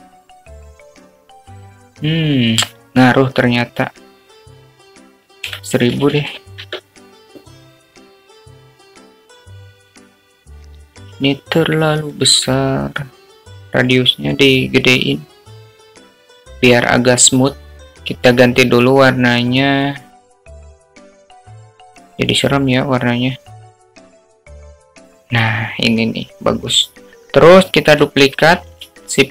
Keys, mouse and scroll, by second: 6.4-9.0 drag, 8.1 0, 8.3 0, 10.4-12.0 drag, 13.5 s, 15.5-17.5 drag, 19.7 click.